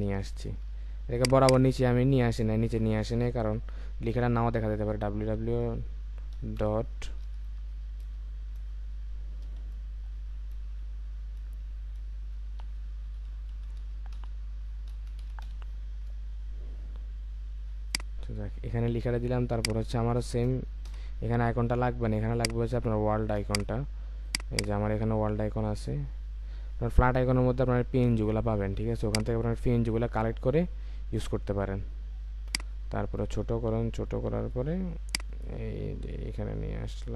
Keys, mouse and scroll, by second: 1.3 double click, 4.6-5.2 typing, 6.3-8.0 typing, 9.4 typing, 12.6-15.1 typing, 23.8 typing, 24.5 double click, 26.2 Right, 26.8 Return.